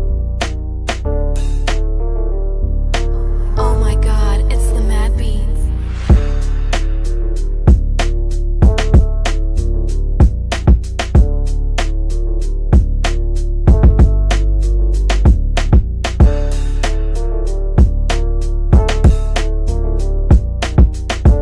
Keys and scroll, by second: 0.0 F3, 1.4 shift+Page_Up, 2.2 shift+F2, 2.4 Escape, 14.1 F3, 17.6 w, 20.2 shift+F2, 20.4 Escape.